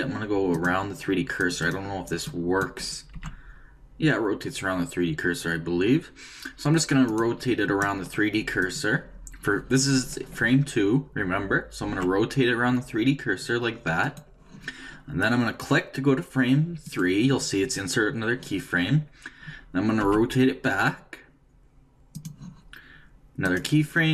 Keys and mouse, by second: 3.1 r, 8.6-10.4 drag, 11.8 r, 16.8-18.6 drag, 20.0 r, 23.4-24.1 drag.